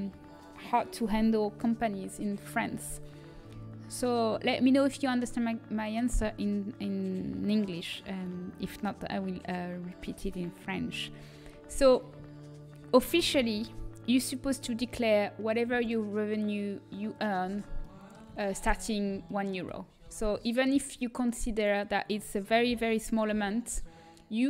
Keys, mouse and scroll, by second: 5.2-7.2 middle drag, 13.1 shift+d, 17.8-20.0 middle drag, 20.0 z, 22.9 g.